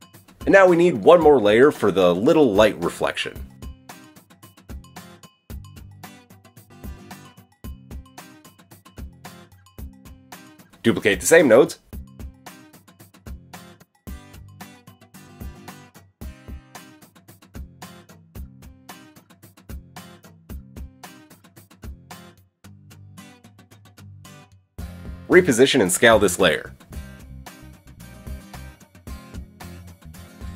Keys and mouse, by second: 0.4 middle click, 0.6 shift+d, 3.1-4.3 drag, 9.0-14.7 drag, 13.9 shift+d, 14.7-15.7 middle drag, 15.7-20.0 drag, 22.4 click, 25.1-30.5 shift+drag.